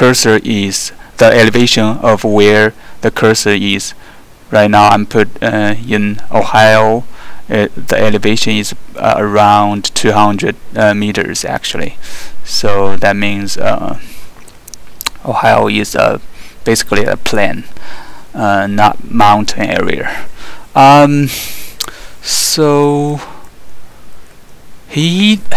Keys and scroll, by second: 22.8 alt+3, 23.4 alt+2, 24.0 alt+3, 24.3 alt+2.